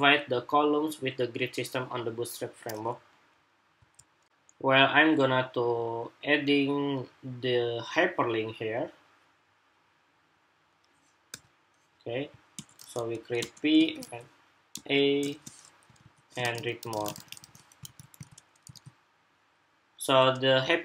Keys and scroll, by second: 4.0 shift+super+2, 17.6 super+s, 17.9 super+Tab, 18.5 super+r.